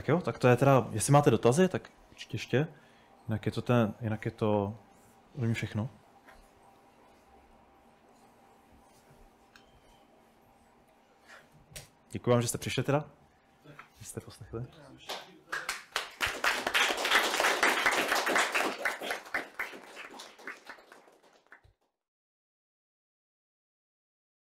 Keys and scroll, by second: 0.5-1.2 typing, 11.0-12.2 typing, 11.2 Escape, 13.7-14.5 typing.